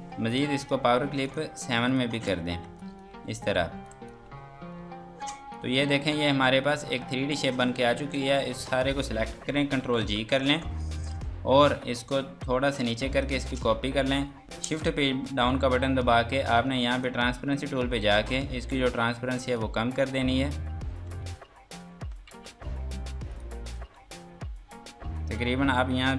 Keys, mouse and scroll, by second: 0.0 Escape, 0.3 click, 2.3 F3, 2.8 click, 3.1 Escape, 3.5 F3, 3.8 click, 4.3 Escape, 5.5 click, 6.3 shift+F2, 6.7 Escape, 7.8 click, 9.8 ctrl+g, 10.6 click, 13.1 ctrl+right click, 14.8 Page_Down, 17.0 click, 18.2-19.5 scroll down 1, 19.5 click, 20.9 F2, 21.1 click, 22.3 ctrl+z, 23.3 click, 23.9 F2, 25.2 click.